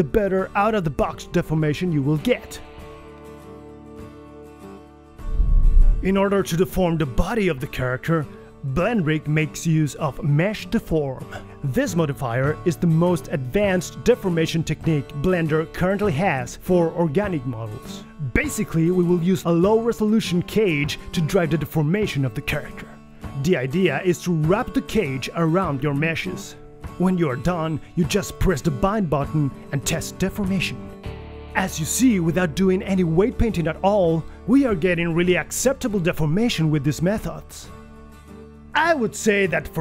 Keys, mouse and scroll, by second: 9.8 alt+s, 11.0-25.1 typing, 20.1 ctrl+KP_1, 30.1 g, 31.2 KP_3, 31.5 g, 32.2 r, 33.4-35.9 typing, 37.2 g, 39.1 r, 39.5 r.